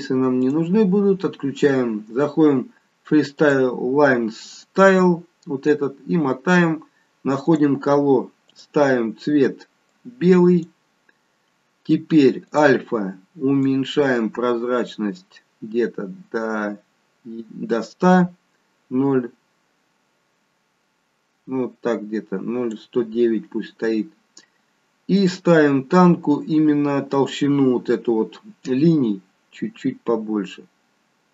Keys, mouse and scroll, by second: 0.4 click, 1.1-2.0 scroll down 1, 2.0-3.0 scroll down 2, 3.4 click, 5.6-6.4 scroll down 4, 7.5 click, 8.7 click, 12.4 click, 13.6 click, 25.2 click, 28.6 click.